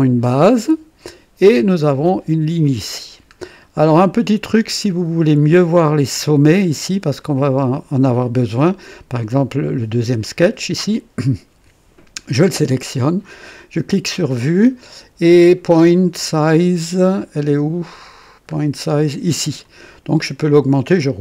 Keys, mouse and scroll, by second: 3.5-3.8 scroll up 1, 4.0 right click, 13.5 click, 14.3-14.8 scroll down 2, 17.8-18.1 scroll down 2, 19.6 click, 20.8-21.2 scroll up 4.